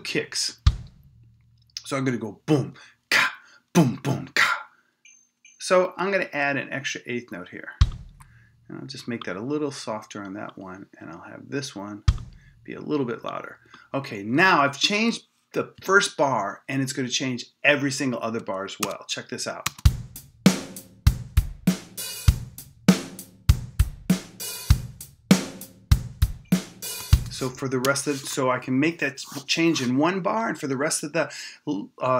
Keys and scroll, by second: 18.8 Return, 19.6 space, 27.0 space, 27.8 Return.